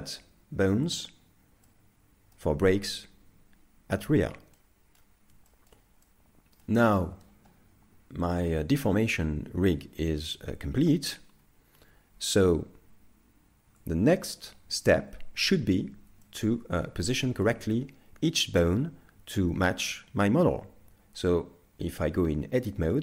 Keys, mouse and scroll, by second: 12.2 t, 13.7 KP_3, 15.0 KP_5, 16.2 shift+middle click, 16.8-17.1 scroll up 5, 17.2 shift+middle click, 17.7-18.1 scroll down 2, 20.1 scroll down 1.